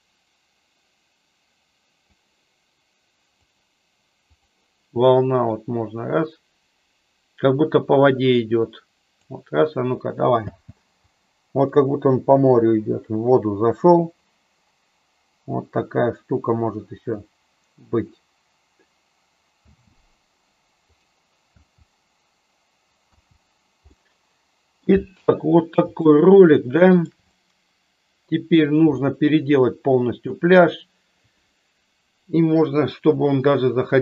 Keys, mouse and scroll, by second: 3.5 click, 5.5-9.5 drag, 10.5 space, 19.7 space, 21.0 click, 21.6 space, 23.3 space, 24.0-25.0 middle drag, 26.1-27.1 shift+middle drag, 27.4-28.6 middle drag, 29.0-30.5 shift+middle drag.